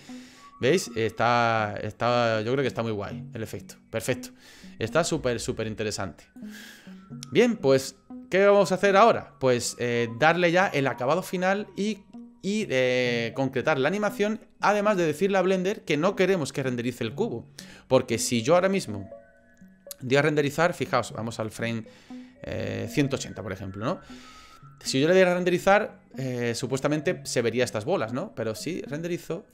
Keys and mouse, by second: 5.2 space, 6.4-12.0 drag, 12.0 middle click, 21.4-22.9 drag, 28.7 click.